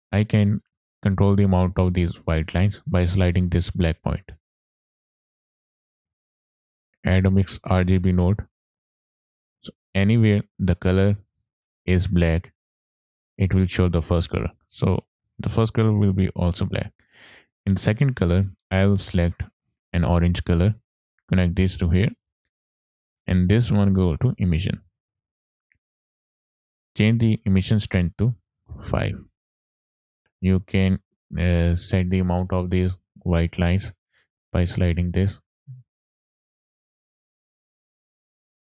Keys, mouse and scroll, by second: 0.3-4.4 drag, 4.4 middle click, 4.4 scroll down 3, 4.5 shift+a, 9.2-10.1 scroll up 3, 9.4 middle click, 14.3 click, 16.4 click, 18.1 click, 21.0 click, 22.1 middle click, 23.7-24.9 drag, 25.7 ctrl+shift+click, 27.4-29.2 ctrl+shift+drag, 30.1 click, 30.2-31.9 middle drag, 32.0-32.5 scroll up 3, 32.6 middle click, 34.0-38.0 drag.